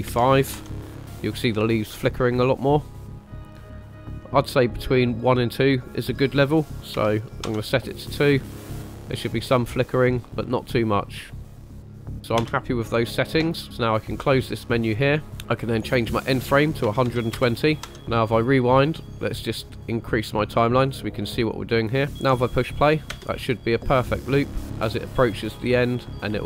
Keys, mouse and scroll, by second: 4.8-8.4 drag, 10.1 scroll up 2, 12.2 scroll down 4, 12.3 space, 14.7 click, 15.6-17.9 drag, 18.1 click, 18.8 middle click, 19.9 click, 20.8-21.6 scroll up 3, 21.6 middle click, 23.1 space.